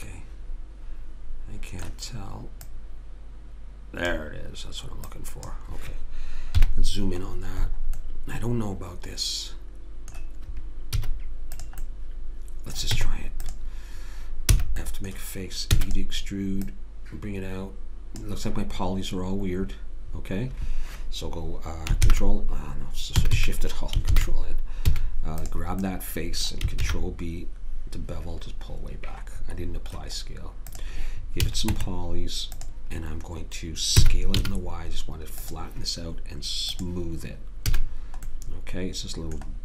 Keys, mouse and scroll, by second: 2.6 click, 6.6 KP_Decimal, 6.8 click, 11.0 s, 12.9 Tab, 14.5 f, 15.7 e, 16.2-18.9 drag, 22.0 ctrl+n, 23.2 a, 23.4 a, 24.1 ctrl+n, 24.9 a, 25.4 click, 26.8 ctrl+b, 31.4 a, 31.7 Tab, 34.0 s, 36.7 click, 37.7 a, 38.4 middle click.